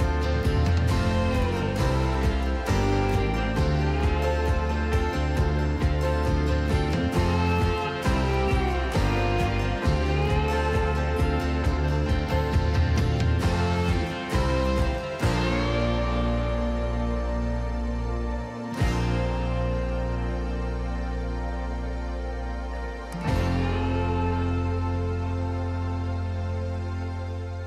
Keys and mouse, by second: 1.4 click, 2.8 click, 4.5-5.7 drag, 7.8-9.1 drag, 14.6 n, 15.4 n, 22.7-25.8 drag, 26.0 middle click.